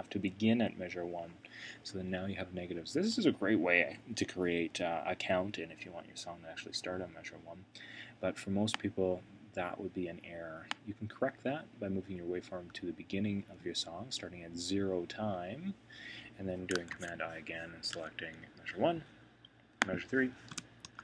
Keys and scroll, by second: 16.9 super+i, 20.8 Return.